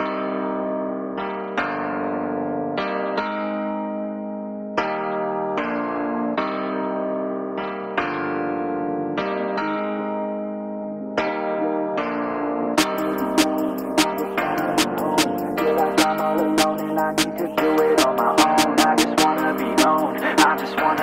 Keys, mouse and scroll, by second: 2.1-2.7 middle drag, 2.7 click, 3.1-4.0 middle drag, 4.0 scroll down 4, 4.1-5.6 middle drag, 5.6 scroll up 1, 5.7-7.3 middle drag, 7.3 shift+a, 10.1-11.3 middle drag, 11.3 g, 12.5-12.9 middle drag, 12.9 scroll down 4, 13.2-13.6 middle drag, 13.6 s, 15.7-16.4 middle drag, 16.4 g, 17.8 r, 18.7-19.9 middle drag, 19.9 r.